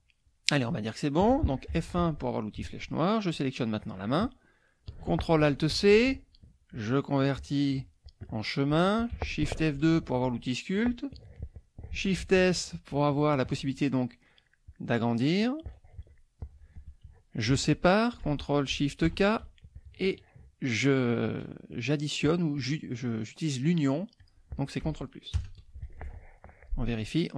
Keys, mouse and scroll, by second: 3.3 click, 5.7 ctrl+alt+c, 9.8 shift+F2, 12.2 shift+s, 14.0 shift+click, 14.8 shift+click, 19.0 ctrl+shift+k, 22.6 click, 24.2 click, 25.3 ctrl+KP_Add, 26.0 ctrl+F1.